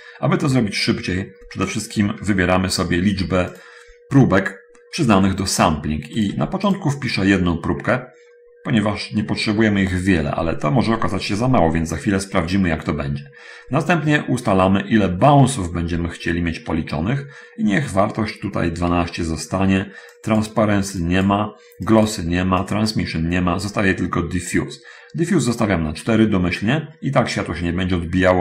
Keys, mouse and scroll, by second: 1.0 middle click, 1.4 middle click, 2.0 middle click, 3.8 click, 6.5 click, 6.8 1, 13.2 middle click, 14.2 middle click, 20.4 click, 21.4 click, 22.0 click, 22.9 click, 26.8-27.4 scroll up 1.